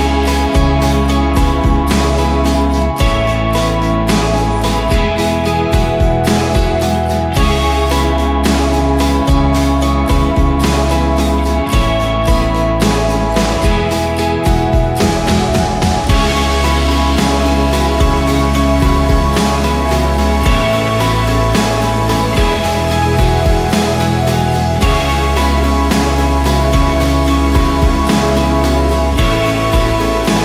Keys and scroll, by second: 0.8-5.8 typing, 7.8-9.4 typing, 8.8 Return, 14.3-16.3 typing, 20.4 Right, 20.5 space, 26.4-27.3 typing, 28.3 Return.